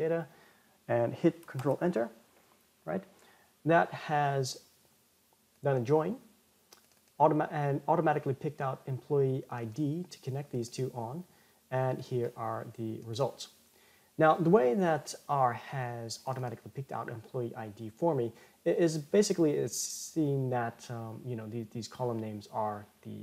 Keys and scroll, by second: 2.2 ctrl+Return.